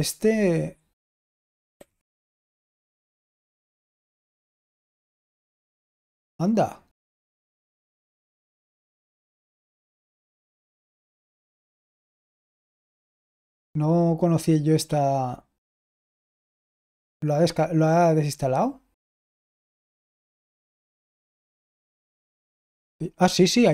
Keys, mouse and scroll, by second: 1.6 typing, 3.6 typing, 4.0 Tab, 4.7 Return, 7.3 ctrl+p, 7.6 ctrl+a, 8.0 alt+f, 8.5 alt+f, 9.4-11.6 typing, 12.7-13.5 typing, 20.6-22.6 typing.